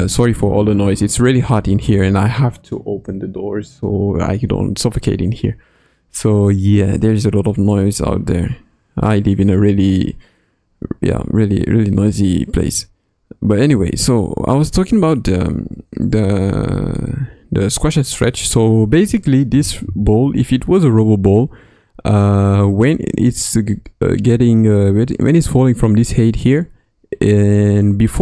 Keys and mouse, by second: 16.2 Left, 16.9 Right, 17.5 Left, 19.5 Left, 19.9 Left, 27.8-28.2 drag.